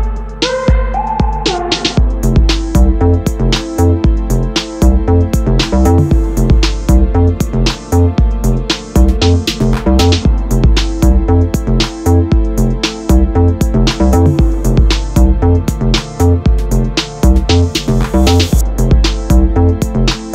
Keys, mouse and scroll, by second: 0.1 click, 0.4 click, 1.2 click, 1.6 click, 2.0 click, 2.3 click, 3.1 KP_Enter, 3.5 click, 3.7 click, 4.1 g, 4.6 click, 4.8 click, 5.3 g, 5.9 click, 6.2 z, 8.0 click, 8.5 middle click, 9.3 click, 9.6 click, 10.1 click, 10.7 middle click, 11.1 KP_0, 11.6 click, 12.3 g, 13.2 click, 13.6 click, 14.1 g, 16.7 Escape, 17.4-19.0 drag, 18.0 g, 19.2-19.5 scroll up 1, 19.5 click, 19.7 scroll down 1, 19.9 s.